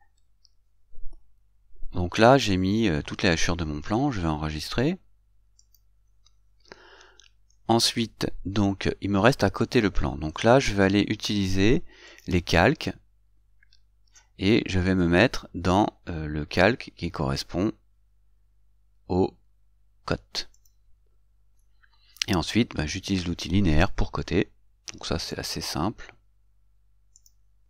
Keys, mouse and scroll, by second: 20.8 click, 25.6 click.